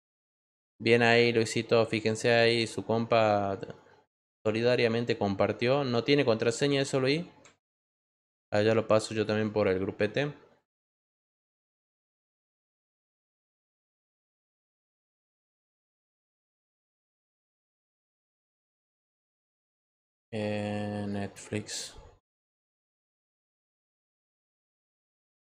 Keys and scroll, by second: 12.9 ctrl+v, 21.8-23.0 typing, 23.3 Return.